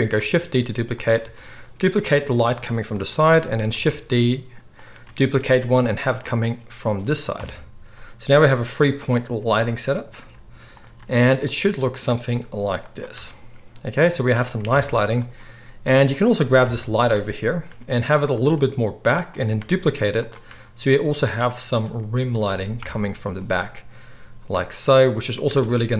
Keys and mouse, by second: 0.1 shift+d, 1.0-11.9 middle drag, 1.2 r, 2.4 g, 3.7 shift+d, 5.0 r, 7.3 KP_7, 10.1 g, 10.9 r, 11.9 click, 12.2 g, 13.1 r, 14.6 KP_0, 15.9 click, 16.6 KP_3, 17.6 g, 18.5 r, 19.5 shift+d, 20.4-25.9 middle drag, 20.4 r, 21.8 g, 22.7 KP_0, 24.4 g, 25.4 r.